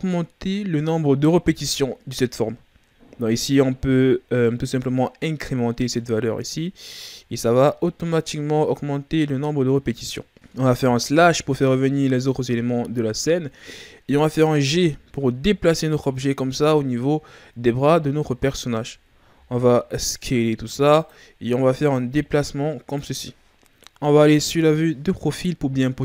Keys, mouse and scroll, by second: 5.7 click, 7.3-7.7 scroll down 3, 7.7-8.1 shift+scroll up 3, 8.8-10.3 scroll down 1, 11.1 KP_Divide, 12.5-14.6 ctrl+scroll up 2, 14.6 g, 16.9-18.4 ctrl+scroll up 9, 18.4-18.8 shift+scroll down 5, 19.3 s, 21.9 click, 24.3 KP_3, 25.7-26.0 ctrl+scroll down 4.